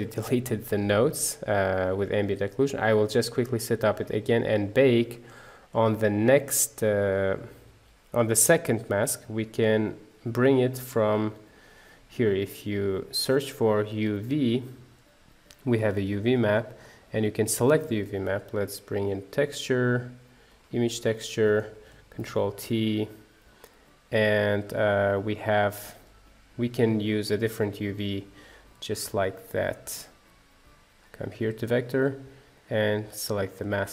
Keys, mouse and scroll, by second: 3.9-15.8 middle drag, 20.6 shift+a, 21.7 click, 22.2 ctrl+t, 23.5 click, 27.5 click, 28.0 Delete, 28.7-31.0 drag, 33.5-33.9 drag.